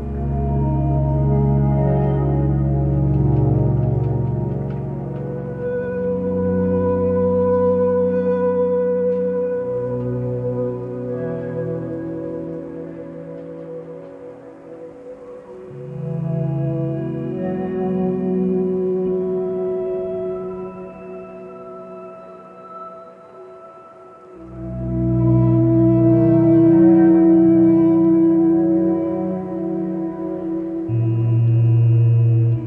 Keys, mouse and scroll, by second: 5.5 ctrl+z, 7.1 ctrl+z, 7.5 ctrl+z, 7.7 ctrl+z, 12.6 ctrl+space, 13.4 click, 14.6 ctrl+space, 18.2 ctrl+space, 26.1 ctrl+space, 28.0 ctrl+z, 30.9 ctrl+z.